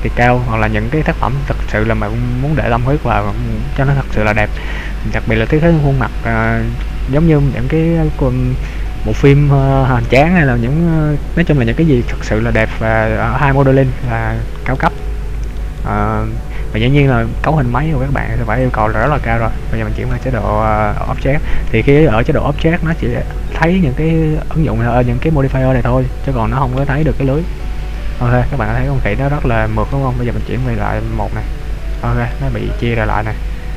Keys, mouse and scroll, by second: 0.2-0.7 scroll down 1, 0.9 middle click, 2.3 scroll down 1, 2.8 middle click, 5.7 middle click, 12.5-13.3 scroll up 4, 13.3-14.1 scroll down 3, 14.1 middle click, 15.1 shift+middle click, 15.9 middle click, 20.3 Tab, 27.1 middle click, 31.4 click, 32.1 middle click.